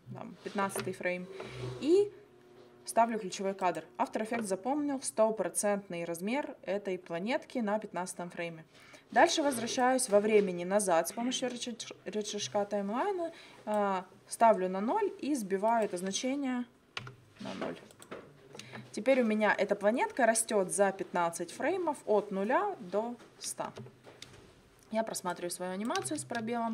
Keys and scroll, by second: 17.0 0, 23.7 space, 26.1 space.